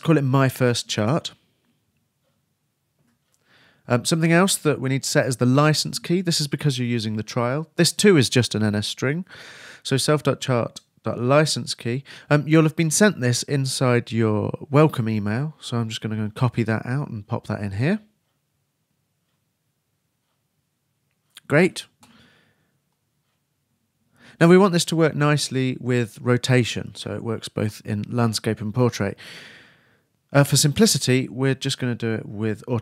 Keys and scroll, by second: 0.8-2.4 typing, 11.1-12.0 typing, 17.7 super+c, 21.4 super+v.